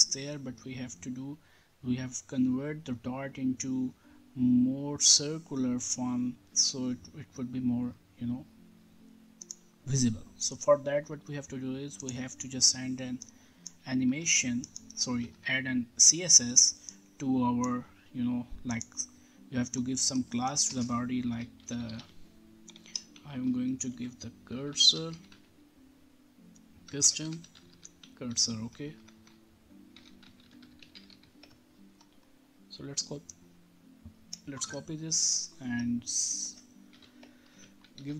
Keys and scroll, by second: 14.1 BackSpace, 20.6-23.1 typing, 23.8 Left, 24.2-25.7 typing, 26.8-31.6 typing, 34.5 ctrl+c, 36.9 ., 37.5 ctrl+v, 37.9 ctrl+s.